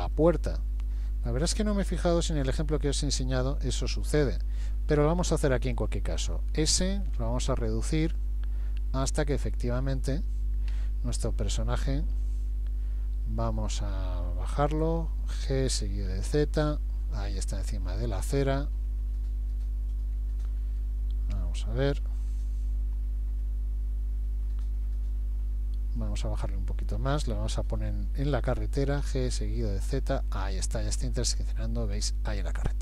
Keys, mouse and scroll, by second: 0.2 middle click, 1.8 g, 6.7 s, 10.7 KP_1, 11.2 KP_3, 11.8 KP_1, 15.5 g, 18.5 middle click, 21.4 KP_1, 23.4 middle click, 28.3 g, 32.5 middle click.